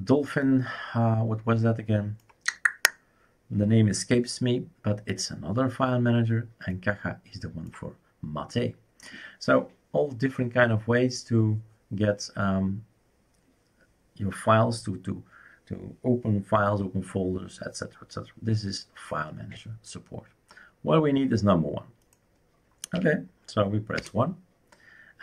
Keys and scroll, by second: 22.9 1, 24.1 Return.